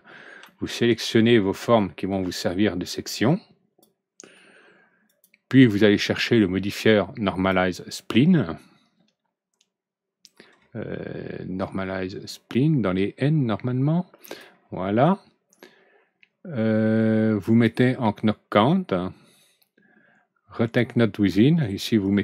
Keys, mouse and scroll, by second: 0.4 alt+Right, 0.4-2.0 middle drag, 2.9-3.7 drag, 5.0 click, 6.3-7.4 drag, 8.6-9.0 scroll up 1, 9.7 scroll down 1, 10.5 scroll up 1, 11.5 scroll up 1, 14.2 click, 17.4 click, 20.5 click, 21.9-22.2 drag.